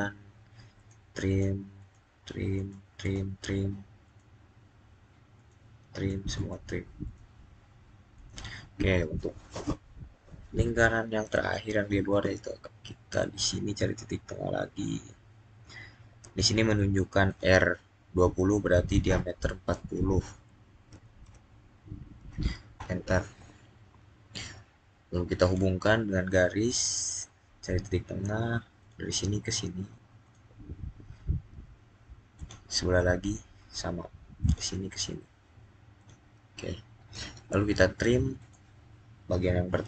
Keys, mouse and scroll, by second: 11.9 click, 17.1 click, 20.8 typing, 22.6 Return, 25.3 click, 28.6 click, 32.2 click, 34.3 click, 38.2 click.